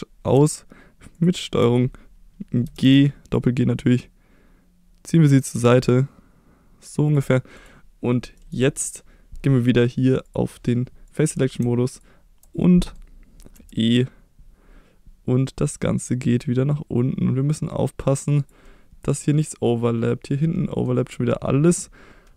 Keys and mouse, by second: 2.6 g, 2.8 g, 7.1 click, 8.5 right click, 10.3 click, 11.1 click, 12.7 middle click, 13.6 e, 18.4 click, 18.6-20.8 middle drag.